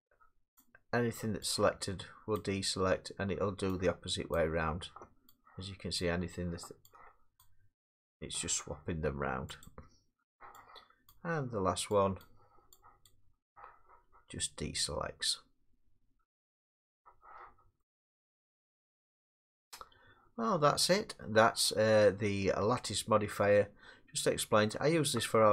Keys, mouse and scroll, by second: 0.6 click, 2.4 click, 4.3 click, 6.0 click, 7.4 click, 9.6 click, 11.1 click, 12.2 click, 13.1 click, 17.8 scroll, 17.9 middle click, 18.1 middle click, 24.7 middle click, 25.2 middle click.